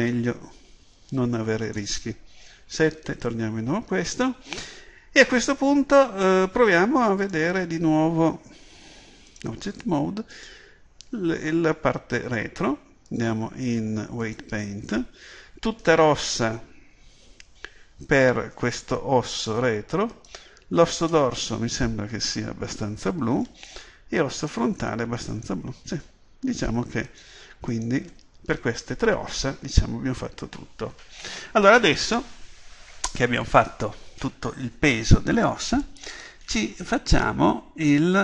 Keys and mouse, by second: 2.7 KP_7, 7.3-9.5 drag, 10.4 right click, 13.1 click, 14.4-22.0 drag, 22.0-24.4 middle drag, 24.4-29.7 drag.